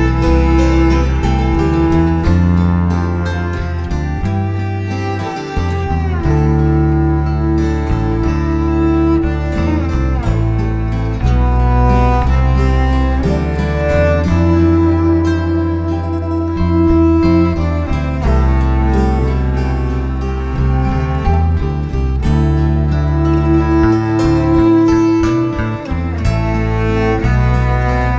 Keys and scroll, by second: 0.2 n, 3.8 ctrl+a, 5.7 Escape, 8.3 Escape, 8.4 Escape, 8.5 Escape, 10.0 n, 10.1 space, 12.0 b, 12.1 space, 20.8 BackSpace, 22.5 2, 22.5 space, 23.4 Escape, 23.6 Escape, 24.1 Escape, 25.5 Escape, 25.8-26.7 typing, 28.0 Escape, 28.1 Escape.